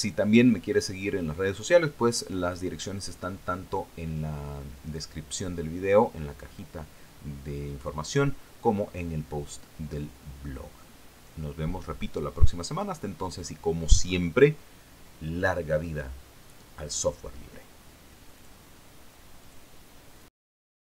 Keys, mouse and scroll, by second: 19.9 click, 20.9 click.